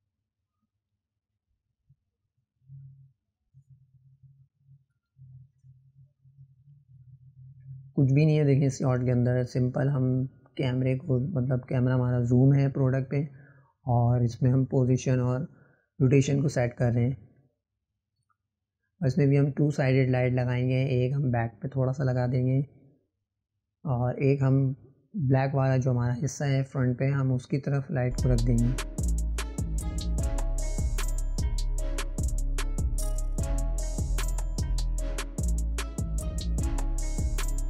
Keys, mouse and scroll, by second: 7.3-8.6 drag, 14.9-17.9 drag, 21.3 click, 21.4 click, 25.5 click, 29.0 click, 30.8 click, 33.4-37.6 drag.